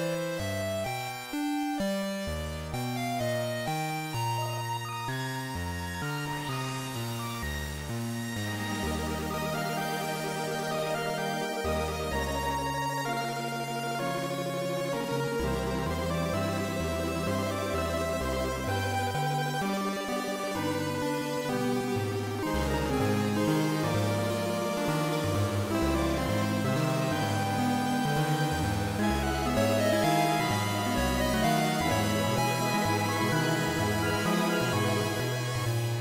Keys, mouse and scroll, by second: 3.2 click, 5.5-6.6 scroll up 1, 6.8-8.2 scroll up 1, 8.2 click, 16.3 click, 24.7 click, 26.9 ctrl+s, 29.7 click.